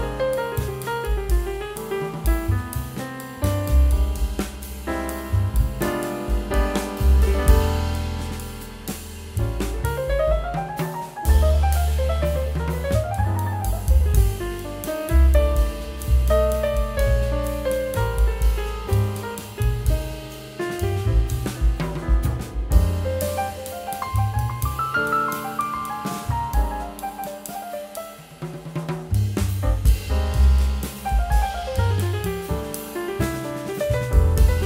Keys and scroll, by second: 2.7 ctrl+z, 4.1 [, 6.4 ].